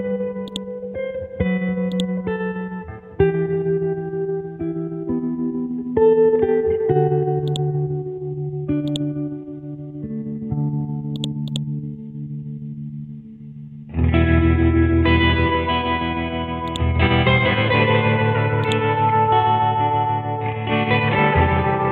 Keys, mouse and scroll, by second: 1.5 Right, 1.8 ctrl+z, 2.1-3.6 drag, 3.6 Right, 4.0 Right, 4.5 Right, 7.5 click, 9.7 right click, 11.1-13.7 drag, 15.2 b, 16.0 Down, 16.6 click, 17.2 scroll down 1, 18.6-20.8 drag, 20.9 scroll up 1.